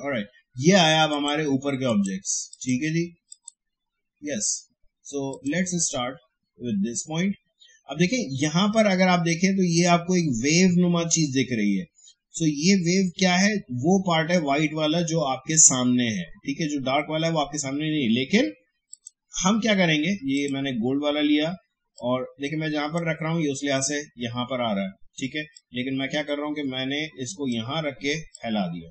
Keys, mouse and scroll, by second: 1.1 click, 18.9-25.5 drag, 25.5-28.9 drag.